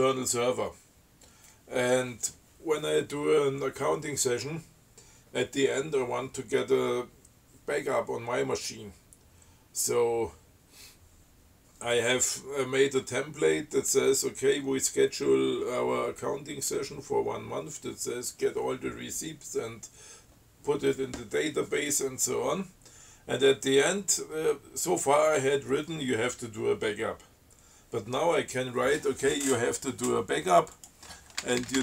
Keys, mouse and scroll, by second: 31.0 click, 31.6 BackSpace.